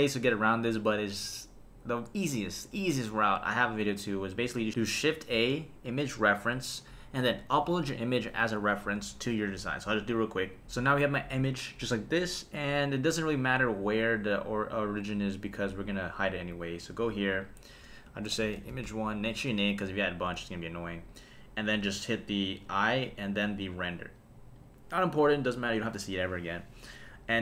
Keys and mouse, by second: 5.3 shift+a, 17.2 click, 17.4-19.4 drag, 22.7 click, 23.7 click, 24.5 click.